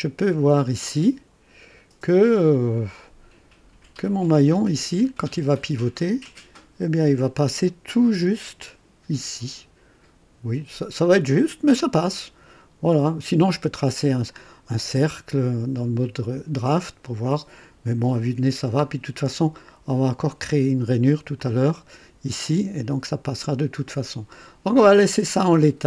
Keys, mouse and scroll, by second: 0.3-0.7 scroll up 1, 1.1-1.9 right drag, 2.3 scroll up 1, 2.9-3.9 right drag, 18.0 scroll up 2, 18.5 scroll down 1, 20.7-21.1 scroll down 2, 21.4-22.1 drag.